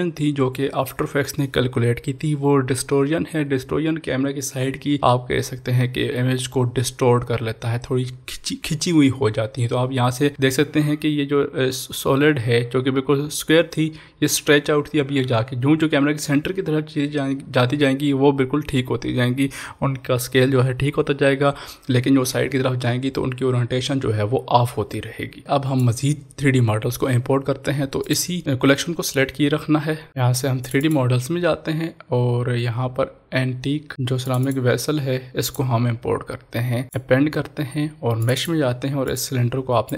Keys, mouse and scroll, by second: 25.4-28.1 drag, 30.1 click, 34.2 click, 34.2 click, 34.3 click, 38.3 click.